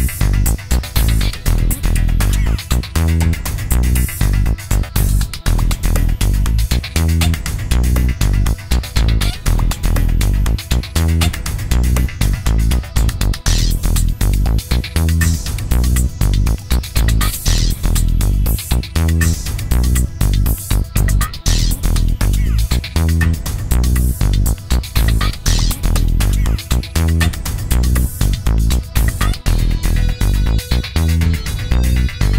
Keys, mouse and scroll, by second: 0.4 shift+click, 1.2 shift+click, 2.2 shift+click, 6.7 ctrl+d, 13.8 click, 16.1 click, 25.4 alt+Right, 27.1 alt+Down.